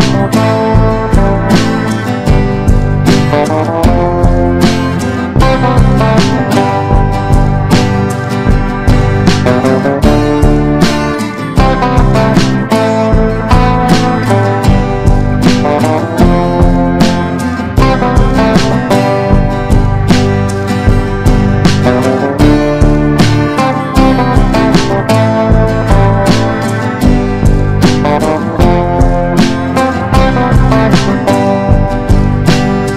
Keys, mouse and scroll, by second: 8.4 F4, 9.0 click, 13.9 F4, 15.0-22.5 drag, 22.5 F4, 23.1 click, 26.4 F4, 27.8 click, 32.6 F4.